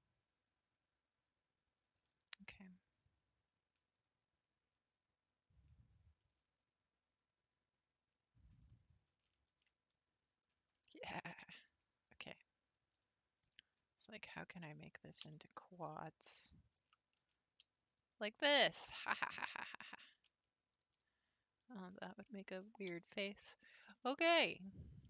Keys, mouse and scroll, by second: 2.9 shift+click, 3.9 shift+click, 8.7 middle click, 9.5 ctrl+r, 10.8 middle click, 11.5 click, 12.2 shift+click, 13.4 shift+click, 14.6 shift+click, 15.2 f, 15.8-17.2 middle drag, 17.2 ctrl+r, 18.5 middle click, 19.4 shift+click, 19.9 click, 20.7 shift+click, 21.6 shift+click, 22.5 shift+click, 22.9 f, 23.4-25.0 middle drag.